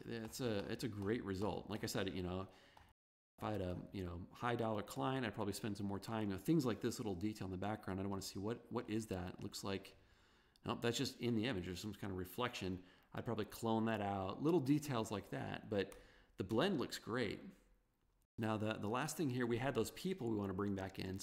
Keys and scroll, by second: 16.3 super+-, 16.6 super+0.